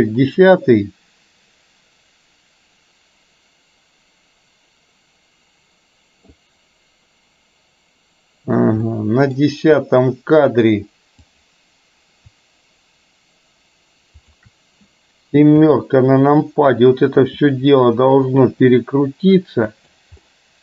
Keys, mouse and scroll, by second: 8.9-9.4 middle drag, 11.4 click, 14.2 shift+click, 15.7 KP_7, 17.2 r, 20.3-20.6 middle drag.